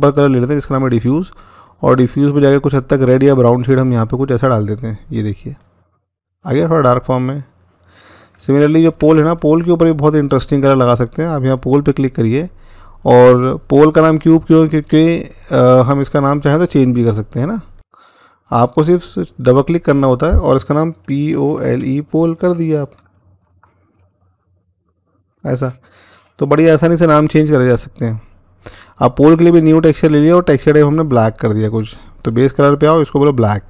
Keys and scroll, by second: 20.8-21.3 typing, 22.9 BackSpace, 23.0 BackSpace, 23.2 BackSpace, 24.3-24.9 typing.